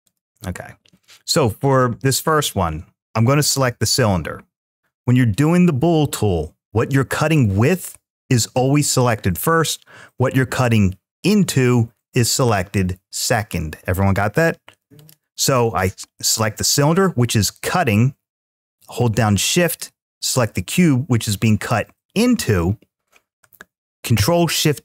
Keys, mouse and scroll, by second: 0.8-1.9 drag, 14.8-15.2 drag, 15.5-18.7 drag, 19.5 shift+click, 24.0 ctrl+shift+b.